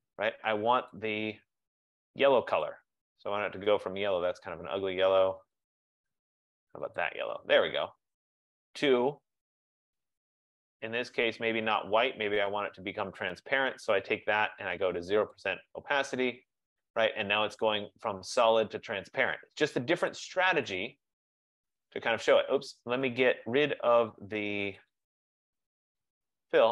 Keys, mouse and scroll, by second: 1.0 click, 2.7 click, 4.4 click, 5.8 click, 7.1 click, 10.6 click, 11.8 click, 14.1 click, 15.4 click, 20.2 click, 20.9 click, 22.5 click, 24.2 click, 25.0 click, 26.0 click.